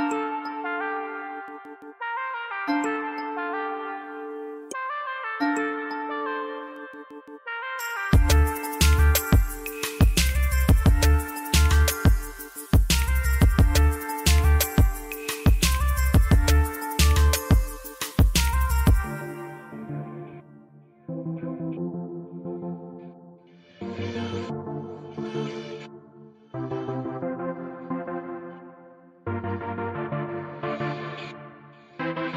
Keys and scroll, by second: 0.6 ctrl+r, 2.9 s, 4.2 2, 7.7 ctrl+r, 13.7 alt+z, 14.2 1, 15.3 alt+z, 16.3 alt+z, 16.6 alt+z, 17.9 alt+z, 18.2 alt+z, 20.9 alt+z, 21.2 alt+z, 23.0 alt+z, 26.7 alt+z, 29.4 alt+z, 29.7 alt+z, 29.9 g, 31.2 ctrl+r.